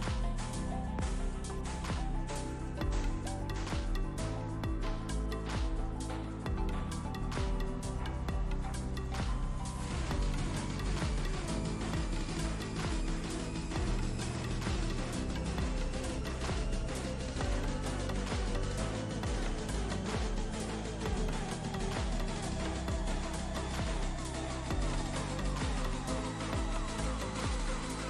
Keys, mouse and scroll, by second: 1.4 ctrl+space, 1.5-1.9 ctrl+click, 2.6-3.3 drag, 4.5-4.8 ctrl+space, 5.6 click, 6.3 v, 6.4 click, 7.0 click, 10.5-13.7 drag, 18.9-21.4 alt+drag, 24.5-28.0 drag.